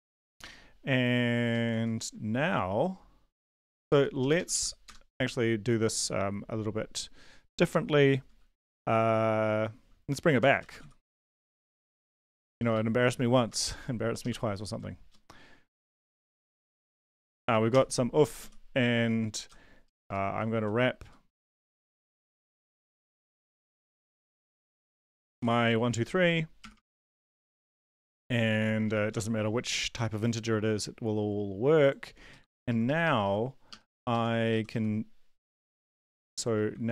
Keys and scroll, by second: 1.7 ctrl+s, 4.2 Up, 4.5 Up, 4.8 Return, 10.1-14.0 typing, 14.5 Left, 14.5 Right, 15.6 Left, 16.0 Right, 16.5 shift+t, 16.7 Right, 17.7 ;, 18.2 Down, 18.4 Down, 19.8 Down, 20.0 Down, 20.3 Left, 21.0 Up, 21.3 Left, 22.0 Left, 22.6 Right, 22.6-26.9 typing, 25.0 Left, 26.0 Left, 27.4 Up, 27.5 Down, 27.7 Down, 27.9 Down, 29.1 Up, 32.3 Left, 32.5 Left, 32.7 Left, 33.7-34.7 typing, 36.7 ctrl+c.